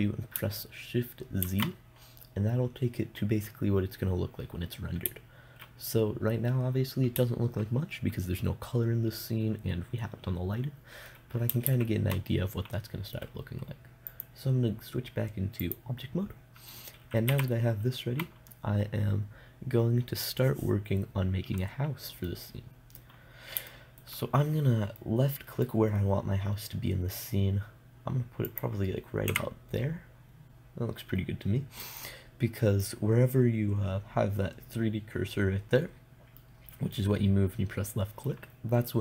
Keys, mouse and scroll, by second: 1.9 shift+z, 12.1 shift+z, 16.2 click, 17.8 a, 24.1-28.9 middle drag, 28.9 click, 29.7 KP_0, 36.0-39.0 middle drag.